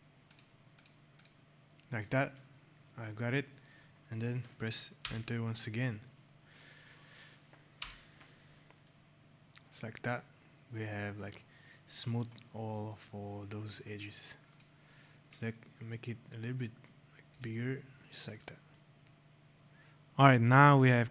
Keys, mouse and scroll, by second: 0.2 click, 1.0 click, 2.9 scroll, 4.9 Return, 7.7 Return, 8.8 right click, 12.5 scroll, 14.4 click, 15.8 shift+click, 17.6 scroll, 18.2 click, 18.6 right click, 21.0 scroll.